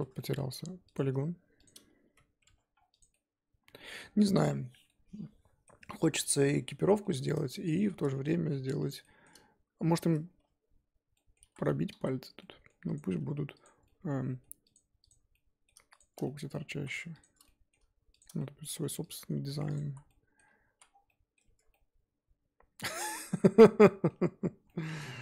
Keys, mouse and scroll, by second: 0.0 Tab, 0.2 middle click, 0.5 2, 0.9 click, 1.6 shift+click, 2.0 f, 2.4 Tab, 2.7 scroll down 4, 2.9 click, 3.1-6.3 middle drag, 6.3-6.9 scroll down 1, 6.9 shift+middle click, 7.1-7.7 scroll up 4, 7.7 click, 8.0 scroll up 2, 8.2 middle click, 8.8 click, 9.0 shift+middle click, 9.6-10.4 scroll up 2, 10.4 Tab, 10.6-11.1 scroll up 2, 11.1 middle click, 11.4 3, 12.0 z, 12.4 middle click, 12.9 click, 13.6 shift+click, 13.8 middle click, 14.7 click, 15.1 click, 15.3 middle click, 16.0 shift+click, 16.2 middle click, 16.7 ctrl+z, 17.2 shift+click, 17.4 middle click, 18.2 shift+click, 18.4 middle click, 19.1 shift+click, 19.7 x, 19.8 z, 20.1 middle click, 20.7 z, 20.9 scroll down 4, 21.0 middle click, 21.4 Tab, 21.7 scroll down 1, 21.7-24.2 middle drag, 24.2-24.6 scroll up 3, 24.6 middle click, 25.0 ctrl+z.